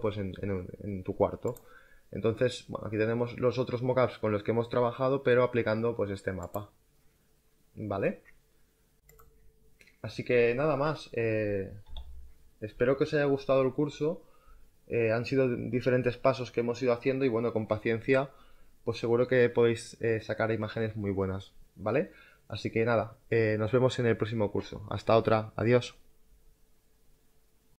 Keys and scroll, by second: 9.0 space.